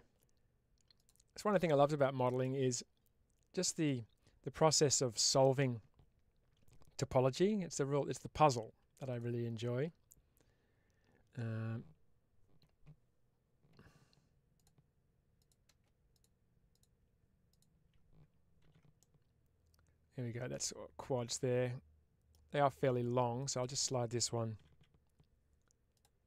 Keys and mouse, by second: 7.2 2, 8.3 click, 16.0 click, 16.6 click, 18.5 ctrl+x, 18.9-22.2 middle drag, 23.3 click, 25.8 click, 25.8 g, 26.1 middle click.